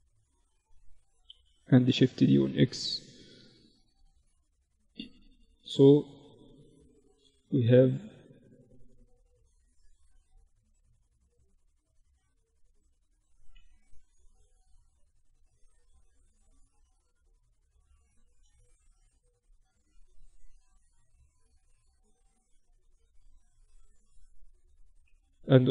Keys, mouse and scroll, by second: 0.9 shift+d, 2.6 z, 4.2 middle click, 4.5-6.7 right drag, 5.8-7.5 drag, 6.8 Tab, 7.7 ctrl+r, 10.8 Tab, 12.4 Tab, 13.2 ctrl+e, 17.1 Tab, 19.8 Tab, 20.3 Tab, 20.7 Tab, 21.2 Tab, 22.7 right click, 23.1 z, 23.3 z.